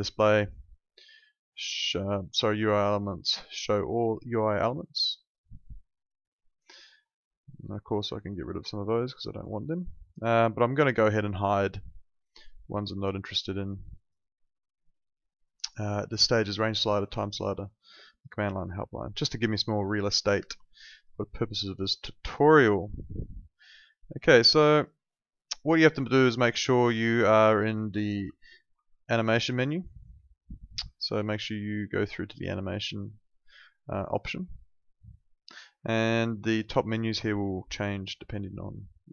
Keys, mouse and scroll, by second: 4.6 click, 13.9 click, 20.7 alt+click, 21.2 alt+middle click, 21.5 alt+right click, 21.7 alt+click, 22.3 alt+right click, 22.6 alt+middle click, 22.9 alt+click, 23.7 alt+middle click, 24.2 alt+middle click, 24.6 alt+right click, 28.7 ctrl+4.